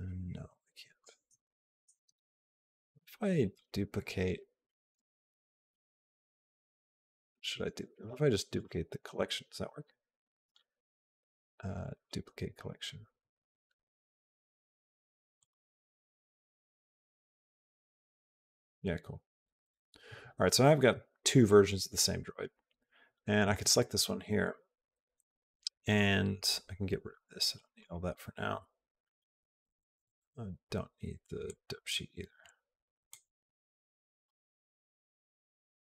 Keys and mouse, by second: 5.8 ctrl+z, 6.4 ctrl+z, 8.4 click, 10.4 right click, 15.2 click, 16.8 click, 18.0 click, 27.3 click, 31.3 click, 32.9 click, 33.9 middle click, 34.0 click.